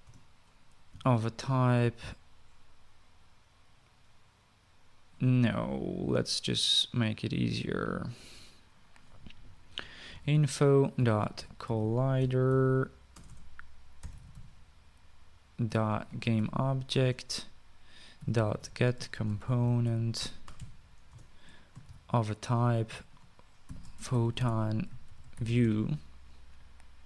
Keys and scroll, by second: 0.8 Return, 1.8 <, 10.6-17.6 typing, 17.8 Return, 18.7-23.1 typing, 21.9 Return, 24.2-26.9 typing.